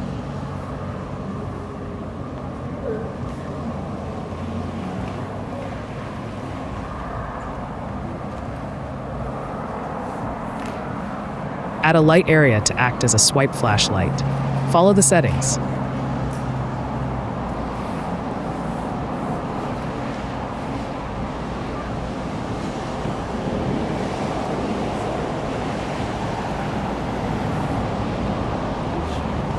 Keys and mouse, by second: 0.4-1.2 drag, 1.9 click, 2.2 drag, 2.6 drag, 2.7 click, 8.3 click, 9.0 click, 12.7-14.4 drag, 14.8 click, 16.3 KP_Decimal, 17.2 click, 18.3 click, 19.0-20.0 drag, 19.3 5, 20.7 click, 23.8 click, 26.2-27.9 drag, 28.2-29.3 drag.